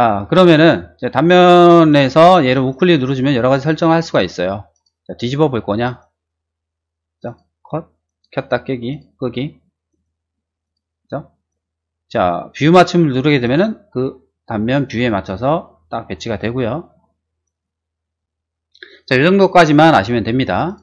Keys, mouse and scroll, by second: 1.8 click, 2.5 right click, 4.7 click, 5.8 right click, 7.2 click, 8.0 right click, 8.9 click, 9.9 right click, 10.6 click, 11.4 right click, 13.4 click, 15.8 middle click, 17.4 right click, 20.6 click.